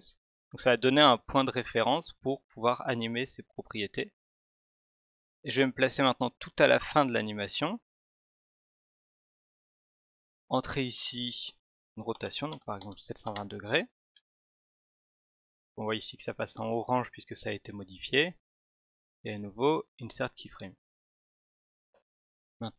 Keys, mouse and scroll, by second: 5.9-8.7 drag, 10.5 click, 16.4 right click, 19.2 click.